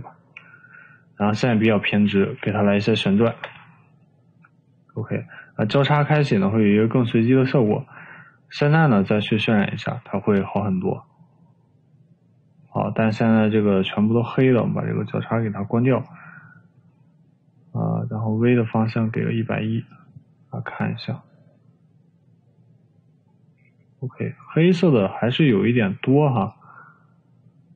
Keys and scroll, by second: 0.5 6, 2.2 3, 3.3 0, 3.6 Return, 13.1 Escape, 18.9 1, 24.3 Escape.